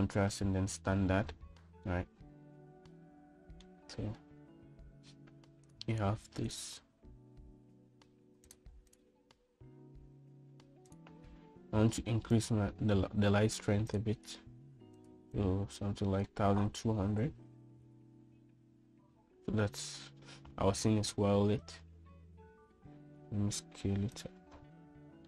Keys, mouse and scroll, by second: 3.1-4.8 middle drag, 9.7 click, 12.1 click, 15.1-20.2 drag, 24.2 s.